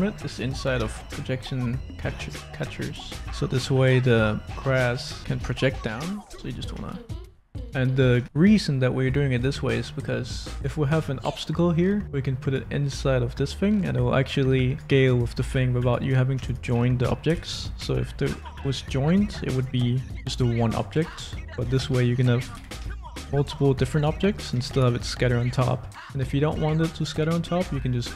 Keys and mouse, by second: 3.2 click, 5.3 Tab, 6.1 a, 6.7 s, 8.2 shift+a, 10.5 middle click, 13.4 s, 15.0 click, 15.0 right click, 15.4 s, 17.3 ctrl+j, 18.4 g, 19.8 click, 20.1 g, 21.0 ctrl+z, 22.5 g, 22.8 z, 24.2 middle click, 24.3 click, 24.5 g, 24.6 y, 25.9-28.1 middle drag.